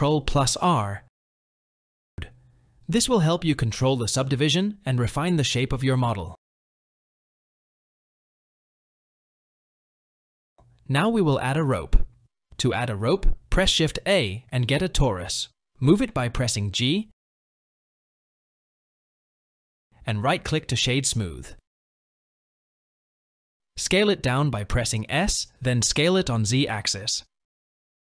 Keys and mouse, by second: 1.4 ctrl+r, 5.8 ctrl+r, 7.8 click, 11.4 Tab, 11.6 KP_1, 13.0 shift+a, 17.9 g, 23.2 s, 24.9 s.